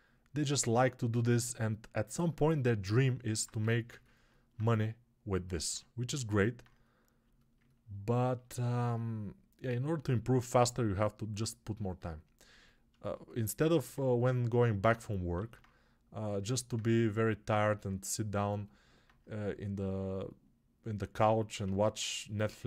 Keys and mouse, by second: 3.5 g, 13.6 alt+q.